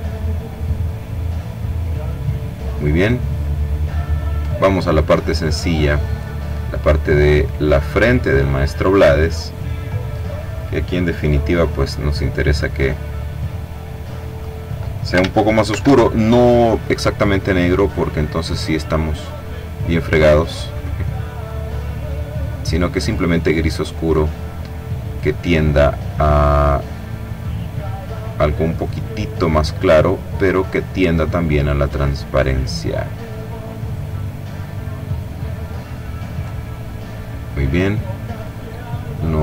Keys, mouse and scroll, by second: 0.6-1.2 scroll up 2, 1.8-2.4 scroll down 2, 2.8-3.2 scroll down 2, 3.2 click, 5.1 click, 5.8 click, 7.2 click, 10.5 click, 11.9-14.7 drag, 15.1 ctrl+shift+f, 17.2-19.2 drag, 19.7 click, 20.9-24.1 drag, 24.5 click, 26.7-29.5 drag, 29.5-31.8 drag, 33.5 click, 34.5 click, 37.8 click.